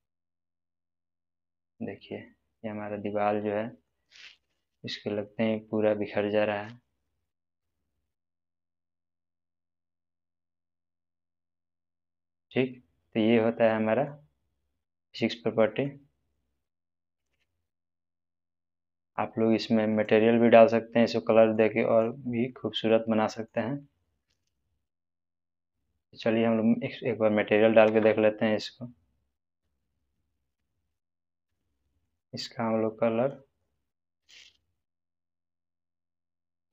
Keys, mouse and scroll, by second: 2.1 space, 2.1-3.9 middle drag, 9.6 scroll up 1, 10.4-11.3 middle drag, 14.2-14.9 scroll down 1, 14.9-16.1 middle drag, 17.8 click, 21.0-21.6 middle click, 21.8 click, 22.5-23.7 middle drag, 24.4 click, 30.5-31.2 click, 31.4-32.0 middle click, 32.0-36.7 drag.